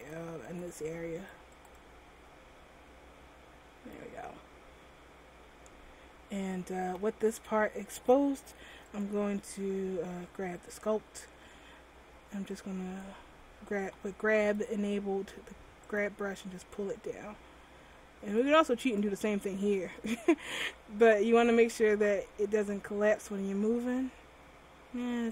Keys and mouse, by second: 5.1 m, 14.2-17.8 drag, 20.1-21.7 drag, 21.7 right click, 22.3 r.